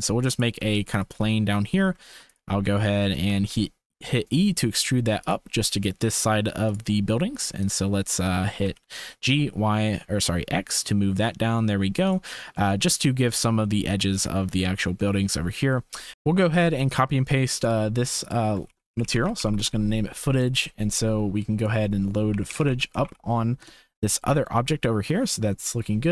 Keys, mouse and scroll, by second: 0.5 s, 1.3 shift+click, 1.7 Tab, 2.0 2, 2.2 click, 2.6 g, 3.2 e, 6.7 click, 8.5 g, 12.5 shift+click, 14.2 Tab, 15.1 shift+click, 16.1 ctrl+s, 18.3-20.0 shift+drag, 19.0 o, 21.6-24.5 drag, 24.7 shift+click.